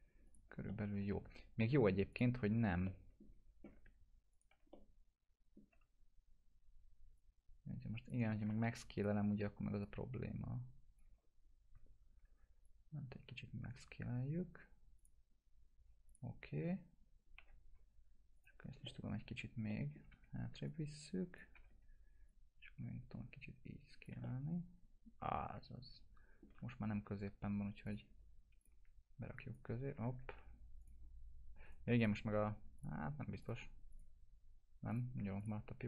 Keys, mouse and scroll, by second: 0.2 click, 0.7-1.3 alt+middle click, 2.1 click, 2.8-3.5 alt+middle drag, 4.3 ctrl+click, 5.0-5.6 alt+middle click, 7.5-8.1 click, 8.5 ctrl+z, 8.9-11.0 drag, 11.9 ctrl+z, 12.6-13.9 drag, 16.5 F4, 16.7 scroll up 1, 17.4 F4, 18.3 click, 18.8-19.5 middle click, 20.1 w, 20.7-21.6 click, 21.3-22.2 typing, 22.2-24.1 drag, 24.2-26.4 alt+middle drag, 27.8 click, 30.3 ctrl+z, 30.8 click, 31.6 right click, 31.9 click.